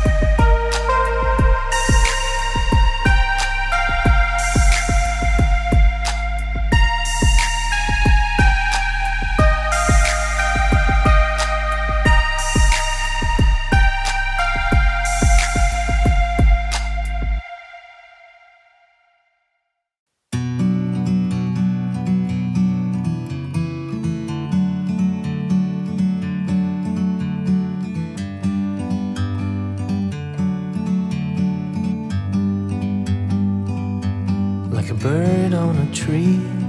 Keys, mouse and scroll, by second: 0.3 click, 1.6 right click, 3.9 click, 5.8 click, 7.5 click, 10.2 Left, 11.1 click, 11.8 Left, 12.4 click, 15.0 click, 16.4 click, 21.7 shift+click, 22.5 click, 24.7 click, 27.2 click, 28.0 shift+click, 29.1 click, 30.6 click, 32.4 click.